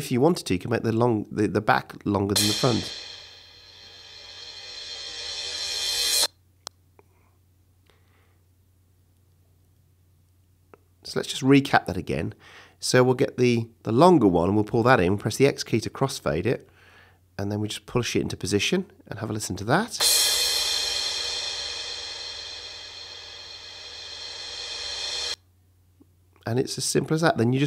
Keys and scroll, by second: 2.0 space, 6.6 space, 7.4 super+space, 7.5 super+z, 15.8 x, 19.9 space, 25.2 space, 26.2 space.